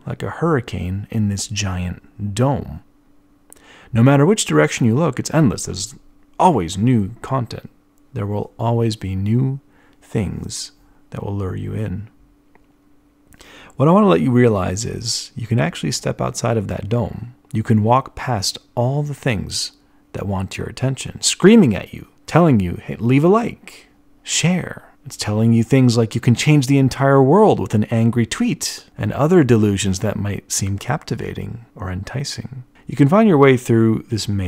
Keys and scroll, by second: 0.6 b, 2.0 b, 8.2 b, 21.8 b, 33.8 e, 34.2 b.